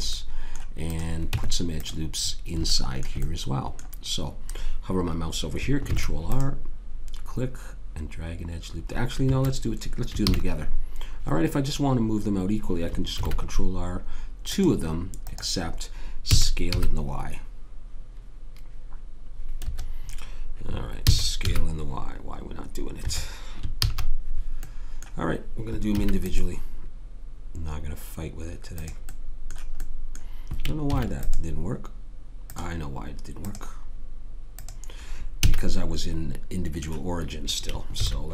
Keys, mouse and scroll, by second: 1.3 Tab, 2.7 middle click, 5.8 ctrl+r, 10.2 ctrl+z, 13.2 ctrl+r, 16.3 s, 21.1 s, 23.8 ctrl+z, 26.0 ctrl+r, 29.1-31.2 middle drag, 30.9 ctrl+r, 34.3 click, 35.4 a, 37.9 ctrl+r.